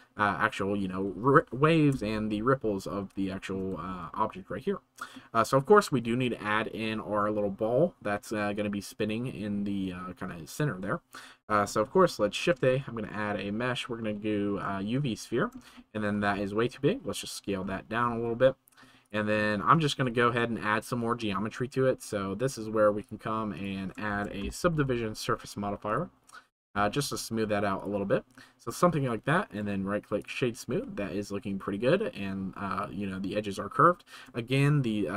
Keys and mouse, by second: 0.1-0.8 middle drag, 3.3 shift+middle click, 5.2-5.5 middle drag, 19.0 click, 19.3 middle click, 20.0 shift+right click, 23.1-26.0 drag, 26.0 right click, 29.5-30.2 drag.